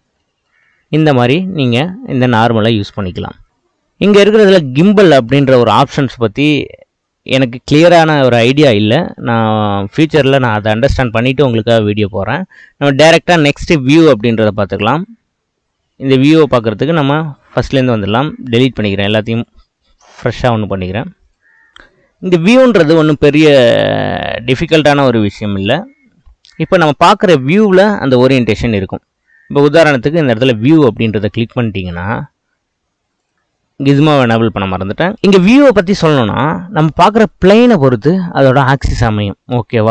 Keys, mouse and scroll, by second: 0.6-1.0 scroll down 3, 1.0-2.6 middle drag, 2.6-6.5 drag, 18.6-21.4 drag, 21.7-23.8 drag, 23.8-25.6 middle drag, 25.6 click, 29.8-32.9 drag, 33.2 click, 33.4-35.2 drag.